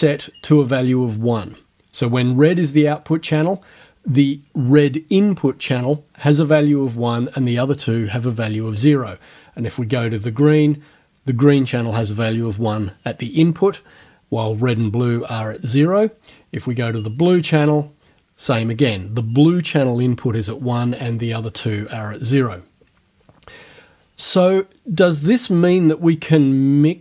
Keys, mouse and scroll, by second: 10.0 scroll down 1, 17.1 scroll down 1, 23.2-23.8 scroll up 2.